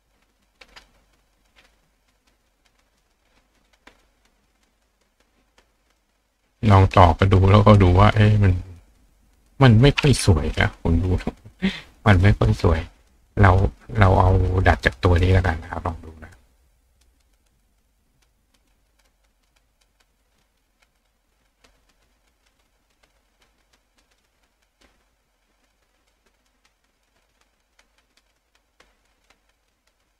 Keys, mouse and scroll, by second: 2.5-3.7 drag, 5.1 click, 5.9 click, 7.1 click, 7.8 click, 11.5 click, 12.1 click, 12.7 click, 12.7 right click, 14.0 click, 14.9 click, 15.3 click, 16.0 click, 16.6 click, 17.0 click, 18.6 click, 19.6-20.5 drag, 21.1-22.3 drag, 21.1 right click, 22.6-23.0 drag, 23.3-24.2 drag, 24.2-25.1 right drag, 25.1-25.7 drag, 26.6 click, 27.6 click, 28.9-29.8 drag.